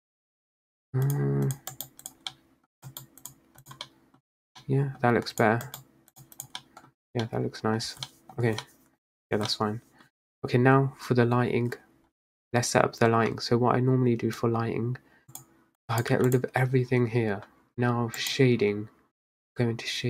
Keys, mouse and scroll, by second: 0.7-1.2 scroll down 1, 1.2 click, 1.6 click, 1.9-2.4 right drag, 2.4-2.9 middle drag, 2.9-3.7 right drag, 3.7 click, 3.9 middle click, 4.3-4.7 scroll down 1, 4.7-5.5 middle drag, 5.5 click, 5.7-6.5 right drag, 6.5 click, 6.7-7.0 middle drag, 7.0-7.4 scroll down 4, 7.4-8.5 middle drag, 8.5 scroll down 1, 8.7-9.4 middle drag, 9.4 scroll down 1, 9.6-10.4 middle drag, 10.4-11.6 scroll down 3, 11.8-12.4 scroll down 4, 15.4 click, 15.9 click, 16.3 x.